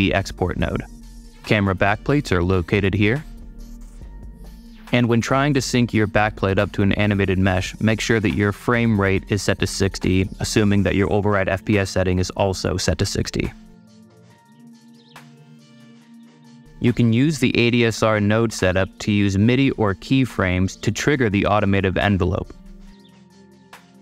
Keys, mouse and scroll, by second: 1.7 click, 2.5 click, 3.4 click, 5.3 click, 5.9 scroll down 2, 7.3 scroll down 2, 8.0 click, 8.9 ctrl+r, 9.4 click, 10.5 space, 13.3 space, 13.5 click, 14.4 space, 16.7 click, 17.1 space, 18.1 ctrl+r.